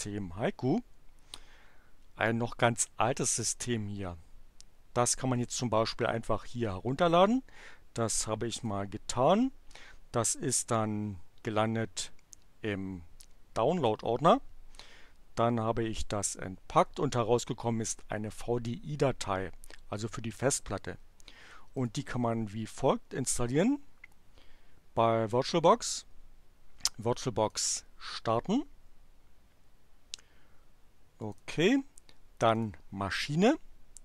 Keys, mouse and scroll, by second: 21.8 click, 27.4 click, 31.3 click, 32.5 click.